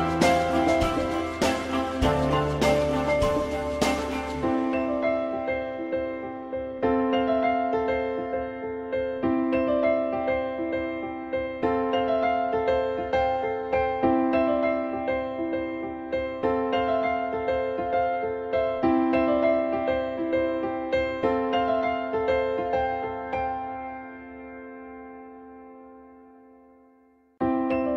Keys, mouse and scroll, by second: 2.7 ctrl+z, 4.5 shift+click, 5.3 ctrl+click, 5.7 ctrl+click, 5.9 ctrl+double click, 6.5 alt+middle click, 8.2 ctrl+click, 9.4 ctrl+BackSpace, 11.3 ctrl+z, 12.0 alt+middle click, 13.7 ctrl+z, 17.4 click, 18.1 alt+middle click, 19.8 click, 22.4-24.8 drag, 25.7 f.